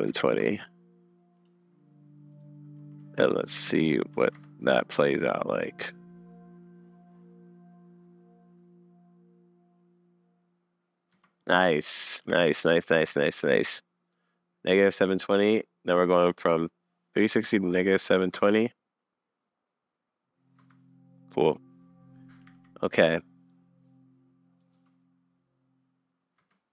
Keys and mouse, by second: 3.1 shift+Left, 3.8 shift+Right, 4.1 shift+Left, 4.4 space, 11.1 space, 12.4 super+s, 14.1-15.1 middle drag, 15.2 middle click, 18.1 middle click, 18.4 space, 20.6 space, 22.5 super+s, 23.5-24.6 drag, 24.7 space, 26.4 space.